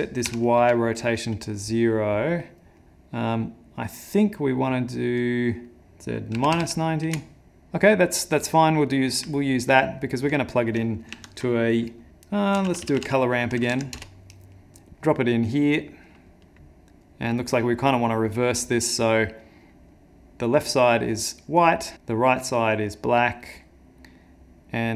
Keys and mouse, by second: 2.8 middle click, 5.7 middle click, 5.8 click, 8.6 middle click, 9.4 ctrl+middle click, 9.8 middle click, 11.1 ctrl+shift+a, 16.6 click, 17.5 click, 21.6 click, 21.9 click.